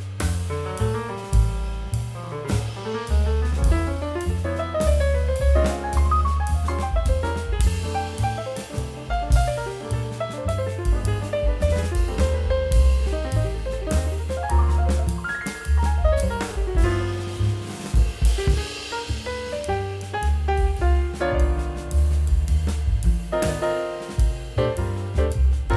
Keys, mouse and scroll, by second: 17.6-18.5 scroll up 1, 18.8 scroll down 1, 19.4 middle click, 19.9 scroll down 1, 20.3 scroll up 1.